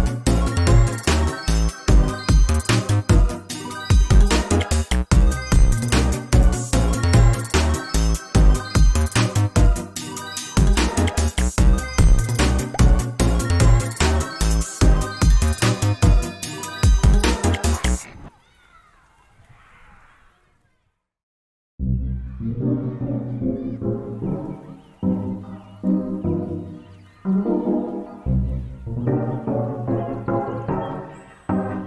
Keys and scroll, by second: 4.8 ctrl+space, 6.3 ctrl+space, 12.8 ctrl+space, 15.7 ctrl+space, 22.8 ctrl+space, 23.7 ctrl+space, 27.9 ctrl+space, 29.5 ctrl+space.